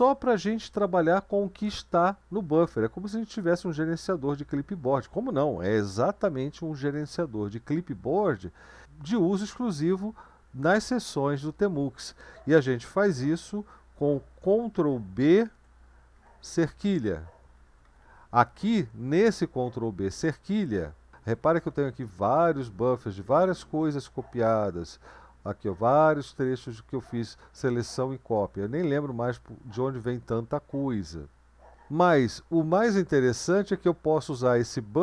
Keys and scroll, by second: 15.3 ctrl+b, 16.1 #, 17.7 Down, 17.8 Down, 18.0 Down, 18.2 Down, 18.4 Down, 18.8 Up, 19.0 Up, 19.2 Up, 19.4 Up, 19.6 Up, 21.1 super+1, 21.1 Down, 21.1 Up, 21.2 Down, 21.4 Down, 21.6 Down, 21.8 Down, 22.0 Up, 22.2 Up, 22.4 Up, 22.6 Up, 22.7 Up, 23.2 Down, 23.4 Down, 23.6 Down, 23.8 Down, 24.0 Down, 25.4 Up, 25.6 Up, 25.8 Up, 26.0 Up, 26.2 Up, 28.5 Down, 28.7 Down, 28.9 Down, 29.1 Down, 33.5 Down.